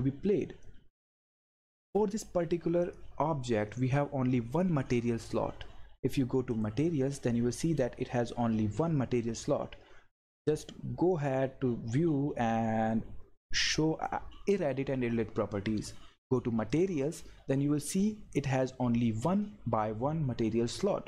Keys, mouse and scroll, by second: 0.6-2.8 drag, 6.5 click, 10.6 click, 13.7-16.7 drag, 16.7 click.